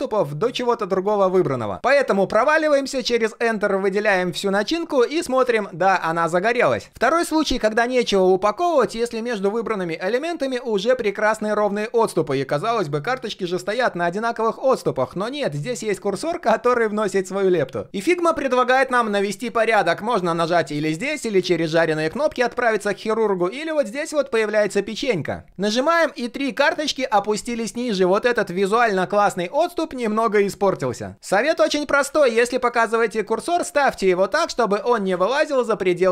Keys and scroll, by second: 32.1 ctrl+z.